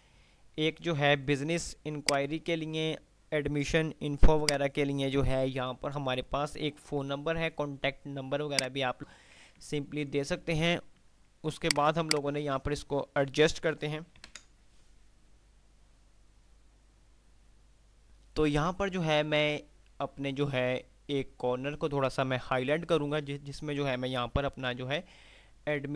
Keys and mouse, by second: 0.0-1.6 click, 1.5 F2, 2.1 click, 2.5 F2, 4.6 click, 7.3 F3, 8.0 F2, 9.0 click, 9.3 F2, 10.5 F3, 10.5 click, 11.8 click, 12.3 F2, 12.6 F2, 12.6 click, 14.5 ctrl+F10, 18.3 click, 24.5 F2.